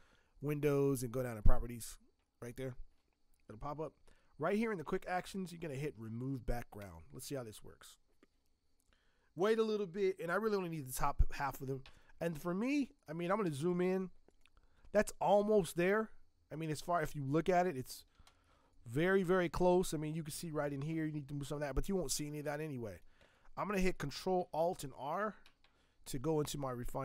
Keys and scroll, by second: 13.4 z, 18.4 space, 22.2 space, 24.8 ctrl+alt+r.